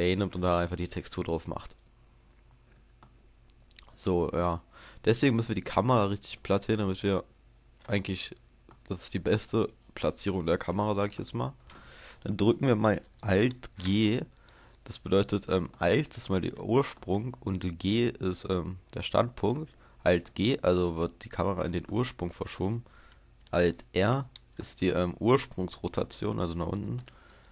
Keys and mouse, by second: 1.8 KP_0, 6.0-14.5 drag, 14.5 alt+g, 22.4-24.0 middle drag, 24.0 alt+r, 24.6-27.5 middle drag.